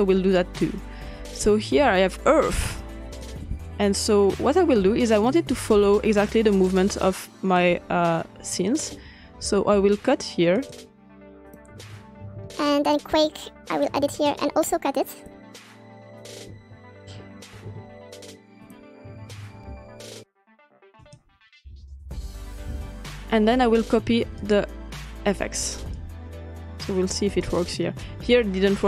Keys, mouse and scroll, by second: 1.5-3.9 drag, 4.0-6.1 ctrl+scroll down 2, 6.1-7.9 drag, 7.9-9.8 ctrl+scroll up 2, 8.0 ctrl+click, 9.8 x, 10.5-12.3 drag, 12.3 s, 13.3 click, 14.2-15.2 ctrl+scroll down 2, 14.3 ctrl+middle click, 15.2-16.5 drag, 16.5 ctrl+middle click, 16.5-17.2 ctrl+scroll up 2, 17.6 x, 18.6-19.6 drag, 19.6 x, 21.0-22.6 drag, 22.9 s, 23.1-24.4 scroll up 1, 24.4 click, 27.3 click.